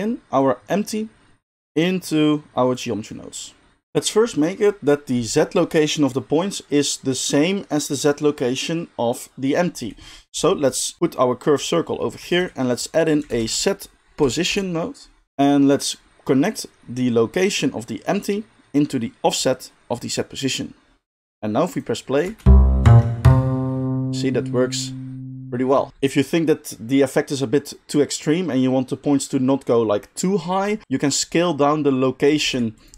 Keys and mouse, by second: 0.3-2.7 drag, 2.7-3.4 middle drag, 3.4-32.9 drag, 12.3 shift+a, 22.2 space, 25.9 space, 32.4 shift+a.